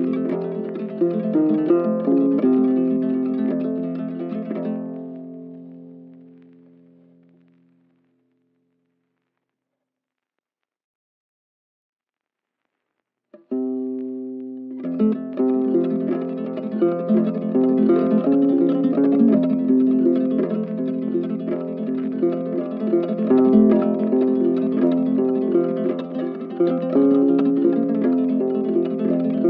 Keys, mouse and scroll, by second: 0.8 double click, 8.2 shift+double click, 9.2 right click, 15.8 double click, 16.6 shift+click, 17.2 shift+click, 17.9 shift+click, 18.3 right click, 26.1 right click, 28.7 right click.